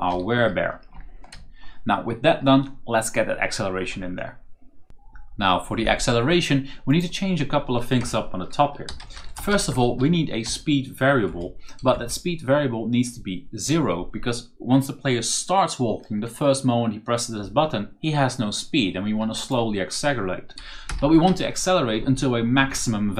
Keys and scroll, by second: 0.0-1.7 typing, 4.8 z, 7.9 Return, 8.6-11.8 typing, 13.5 o, 20.6-21.7 typing.